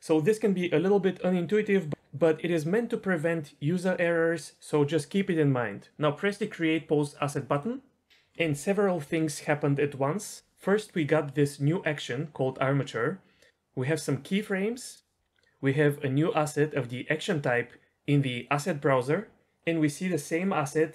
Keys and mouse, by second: 7.5 click.